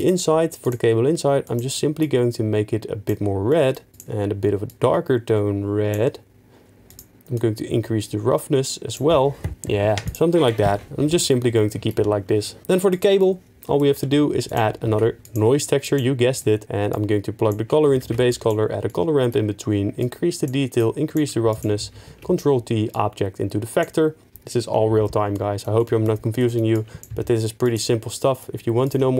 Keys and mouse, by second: 3.9 click, 7.8-9.0 drag, 10.5 middle click, 11.3-11.8 middle drag, 12.9 click, 15.0 shift+1, 15.3 click, 18.5 ctrl+q, 20.4 click, 21.8 ctrl+t, 26.4-26.8 middle drag, 27.2 g, 28.0 middle click, 28.8 click.